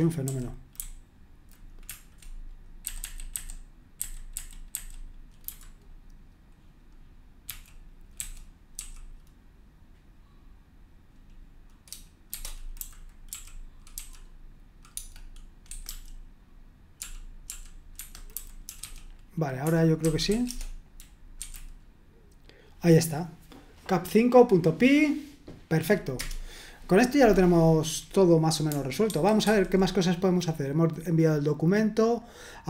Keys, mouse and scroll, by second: 0.0-1.4 typing, 2.8-5.4 typing, 7.5-8.8 typing, 12.1-14.9 typing, 15.7 Escape, 17.5-21.9 typing, 17.9 Escape, 26.2 Return, 29.0 super+1, 29.4 super+2.